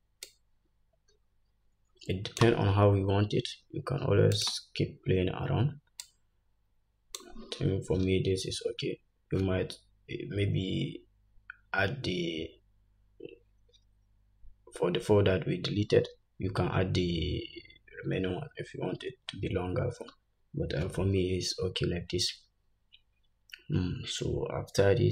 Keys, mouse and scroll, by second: 0.4-1.4 drag, 4.6-6.2 drag, 5.1-6.1 scroll down 1.